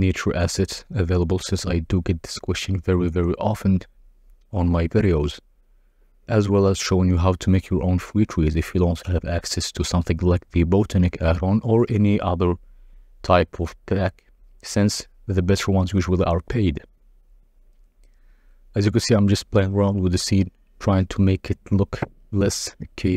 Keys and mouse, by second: 0.3 KP_0, 0.9 z, 3.5 click, 4.0 click, 4.8 Tab, 4.9 a, 5.3 s, 5.4 z, 7.3 Tab, 9.8-10.7 drag, 10.9 Tab, 11.1 a, 11.2 s, 11.3 z, 13.7 r, 13.9 x, 15.3 g, 15.4 z, 16.6 Tab, 17.5 click, 18.5 click, 18.6 g, 18.7 z, 21.6 click, 22.8 click.